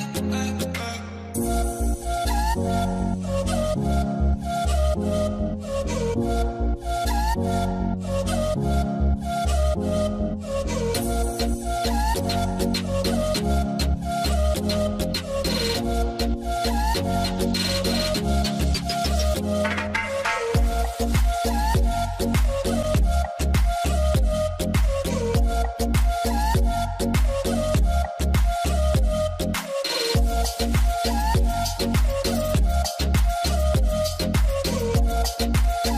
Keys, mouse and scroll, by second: 0.2 double click, 3.8 double click, 12.5 double click, 16.4 double click, 18.7 double click, 21.0 double click, 26.0 double click, 28.0 double click.